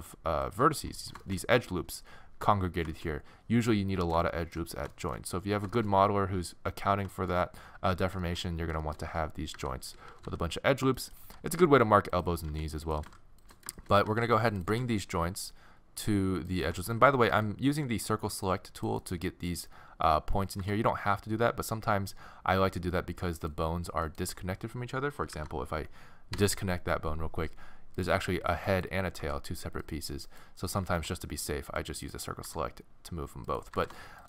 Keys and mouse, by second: 1.0 middle click, 1.3 middle click, 1.4 click, 2.7-10.9 middle drag, 9.5-11.2 typing, 11.1-12.9 drag, 12.5 r, 13.0 g, 13.8-16.2 middle drag, 14.1 a, 14.2 c, 14.7 g, 16.8 click, 17.3 a, 17.8 click, 17.8 c, 18.2 middle click, 18.8-20.4 drag, 20.4 middle click, 20.6 g, 24.1-26.9 drag, 25.3 alt+p, 28.0-32.0 drag, 29.2 g, 30.8 a, 30.9 c, 32.5 g, 33.7 g.